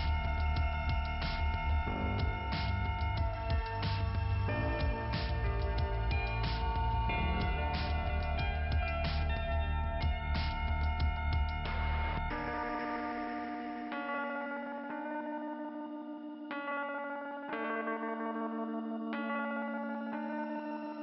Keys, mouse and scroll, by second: 0.1 click, 0.3 click, 2.8 click, 3.8 click, 4.3 click, 5.8 click, 6.3 click, 6.9 click, 12.5 click, 13.0 click, 14.7 scroll down 2, 14.9 scroll up 1, 15.1 scroll down 1, 15.2-16.0 scroll up 2, 17.1-17.9 scroll down 1, 17.9 click, 19.4 scroll down 1, 20.5-20.8 scroll up 2.